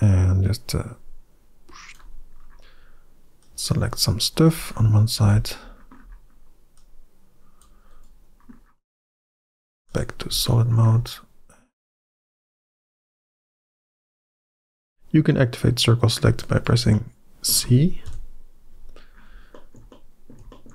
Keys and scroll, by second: 5.0 c, 9.0 z, 13.1 c, 17.9 KP_Decimal.